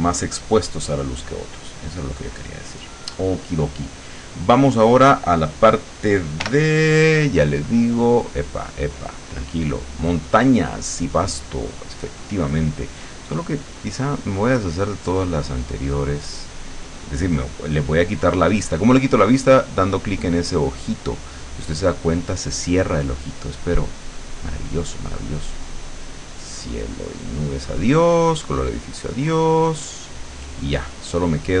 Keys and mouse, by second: 0.2 click, 0.7 click, 1.3 click, 1.7 click, 6.5 l, 7.5 click, 8.5-10.3 drag, 10.9 click, 13.8 click, 16.0 click, 16.4 click, 17.5 click, 19.9 click, 20.6 click, 21.9 click, 23.5 click, 24.0 click, 25.3-26.7 drag, 27.3 click, 28.6 click, 29.6 click, 31.1-31.6 drag.